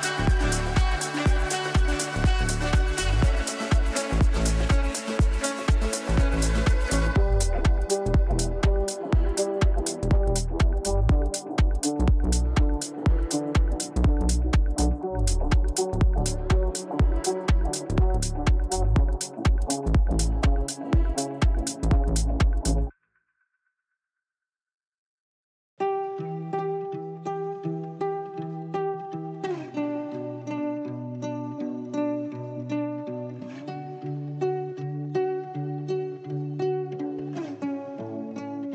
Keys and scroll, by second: 27.2 ctrl+q.